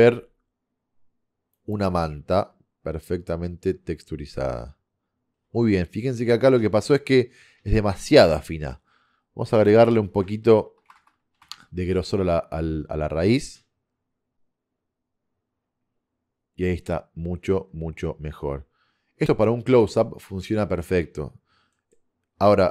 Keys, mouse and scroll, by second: 1.7 click, 10.3-14.4 drag, 11.0 KP_0.